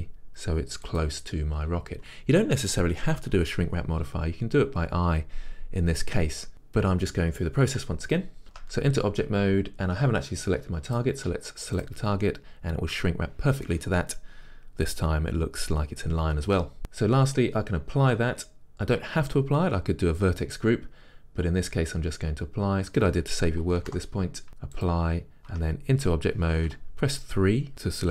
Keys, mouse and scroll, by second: 1.1 click, 8.5 Tab, 11.3 click, 24.9 click, 25.5 Tab, 26.7 3.